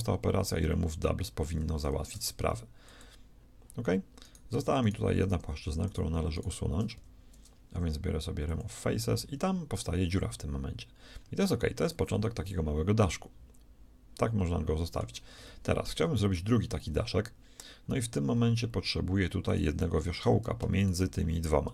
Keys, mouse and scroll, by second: 0.2 w, 1.6 Escape, 2.1 w, 4.2-8.3 right drag, 6.9 x, 10.8-12.7 middle drag, 13.3 middle click, 15.6-17.2 shift+middle drag, 19.4-21.7 right drag.